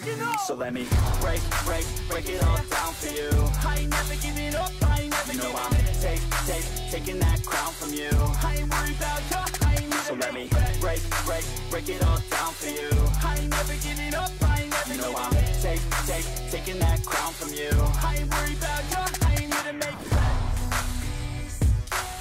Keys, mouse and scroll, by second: 2.8 0, 3.3 ., 3.8 3, 4.1 Return.